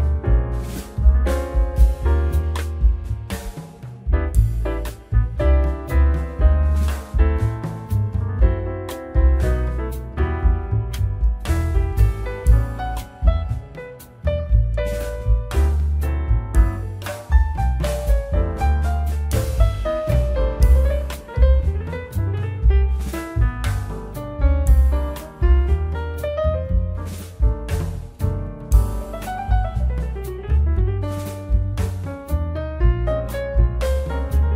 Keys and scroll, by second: 2.6 Tab, 9.3 z, 11.0 s, 19.7 z, 23.1 Tab, 28.8 ctrl+z, 30.8 KP_9, 31.0 KP_0, 31.3 Return, 32.2 Tab.